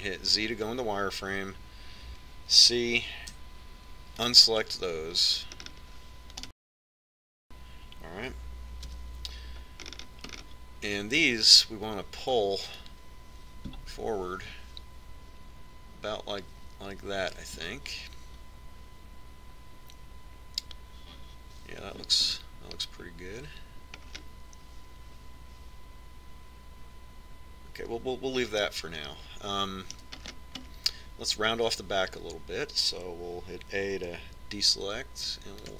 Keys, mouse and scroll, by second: 2.2 z, 4.6 c, 8.4-10.2 right drag, 9.9 KP_Decimal, 10.6-13.4 middle drag, 13.8-18.4 drag, 25.1-27.1 middle drag, 29.7-33.6 middle drag, 34.8 a.